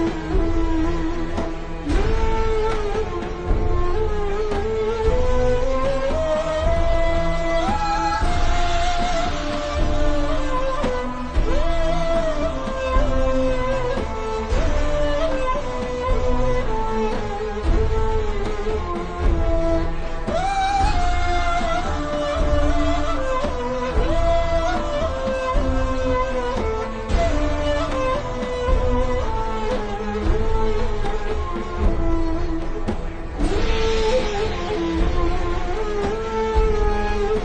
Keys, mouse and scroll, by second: 1.1-2.0 alt+shift+scroll down 2, 2.0 click, 4.2 click, 4.7-5.1 alt+shift+scroll up 2, 5.6 click, 5.8 alt+shift+scroll down 1, 6.4-6.8 alt+shift+scroll up 2, 6.8 click, 8.0 shift+scroll up 2, 8.3 click, 8.9 click, 9.2-10.5 scroll down 1, 11.0-11.6 scroll down 1, 11.7-12.3 alt+shift+scroll down 2, 12.3 scroll up 1, 13.7-14.3 alt+shift+scroll up 2, 14.3 click, 16.3 Up, 16.6 Right, 18.0 click, 18.2-18.7 alt+shift+scroll down 3, 18.7 click, 19.5 Down, 19.6 Left, 20.3-20.7 scroll up 1, 20.7 click, 21.1 alt+shift+scroll down 1, 22.1-22.5 scroll down 1, 23.9-24.2 scroll up 1, 24.7 scroll down 1, 25.0-26.0 alt+shift+scroll up 2, 26.1 ctrl+scroll up 1, 27.0-27.7 scroll up 1, 27.9 scroll down 1, 28.0 ctrl+scroll up 1, 28.2-29.0 scroll down 1, 29.0 click, 30.1 alt+shift+scroll up 2, 31.1 shift+click, 31.8 click, 32.8 click.